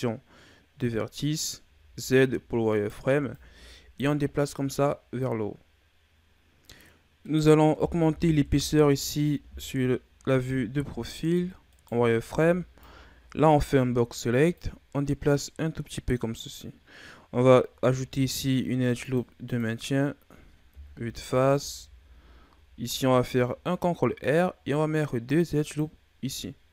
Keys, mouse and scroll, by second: 2.6 right click, 3.0 b, 5.1 click, 7.3-8.4 middle drag, 8.4 KP_3, 9.7-10.6 scroll up 1, 10.6-11.0 shift+scroll up 1, 11.0 z, 11.7 right click, 12.2 b, 14.6 click, 18.0 ctrl+r, 20.7 KP_1, 21.3 z, 22.6 ctrl+r.